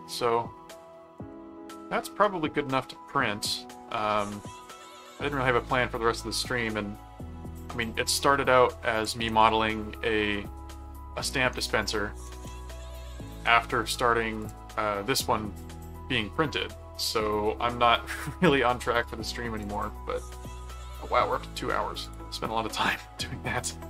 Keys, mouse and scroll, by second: 1.3 middle click, 2.7 middle click, 4.3 middle click, 5.2 middle click, 7.6 ctrl+Tab, 9.0 ctrl+click, 10.4-11.5 middle drag, 12.5 ctrl+Tab, 13.2 ctrl+click, 14.4 click, 19.6 click, 22.0 click, 22.9 ctrl+Tab.